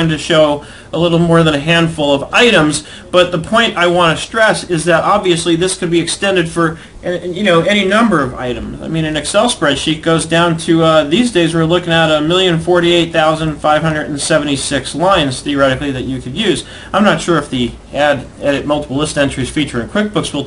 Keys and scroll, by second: 8.9 ctrl+Down, 9.9 Up, 12.9 ctrl+Up, 13.5 Down, 14.1 ctrl+Down, 14.9 ctrl+Up, 15.3 Down.